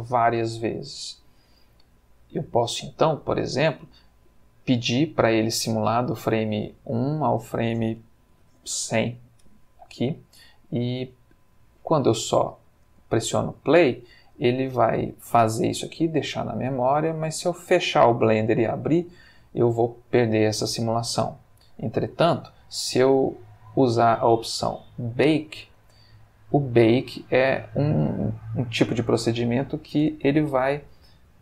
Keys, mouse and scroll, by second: 7.3 click, 8.3 1, 8.4 0, 9.0 Return, 12.8 space, 21.1 Escape, 26.0 click.